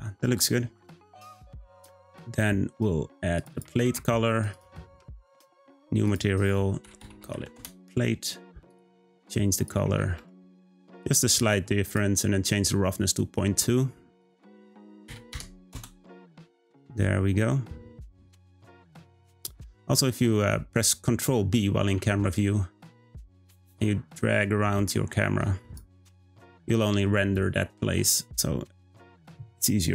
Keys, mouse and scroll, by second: 4.5 click, 5.5-8.7 drag, 14.2-17.2 drag, 21.8 ctrl+b.